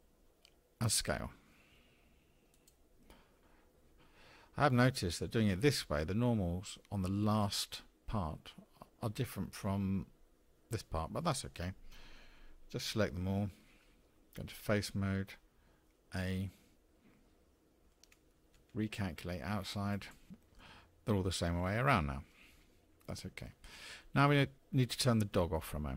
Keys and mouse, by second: 14.5 3, 16.1 a, 18.5 alt+n, 20.3 click, 21.4 click, 21.9 middle click, 22.3-23.4 drag.